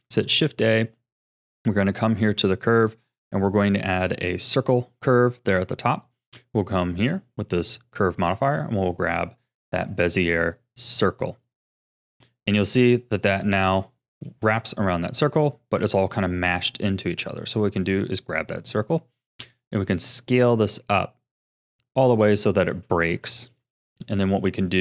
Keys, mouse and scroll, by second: 5.6 click, 6.0 click, 8.2-11.3 drag, 12.9 middle click, 13.9-14.2 scroll up 3, 14.2-17.8 shift+middle drag, 17.8 click, 18.5-19.4 middle drag, 19.4 s, 23.2-24.8 shift+middle drag.